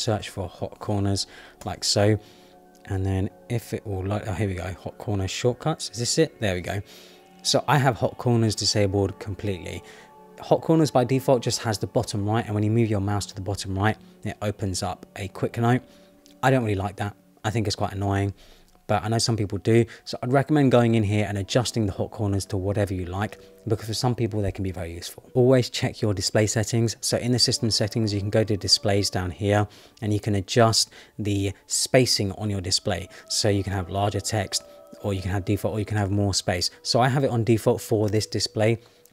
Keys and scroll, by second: 1.2 Down, 1.6 Return.